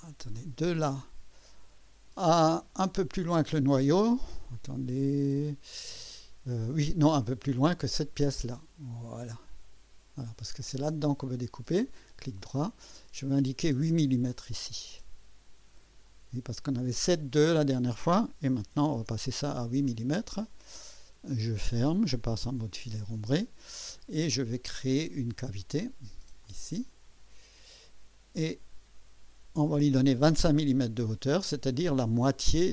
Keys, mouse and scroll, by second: 0.4 click, 2.8-3.2 scroll up 2, 9.4 click, 12.1 right click, 13.9 click, 16.0 click, 18.4-19.1 typing, 21.0 click, 22.5 Return, 23.7 scroll down 1, 24.2-25.1 typing, 24.3 click, 26.4 click, 29.4 KP_2, 29.7 KP_5.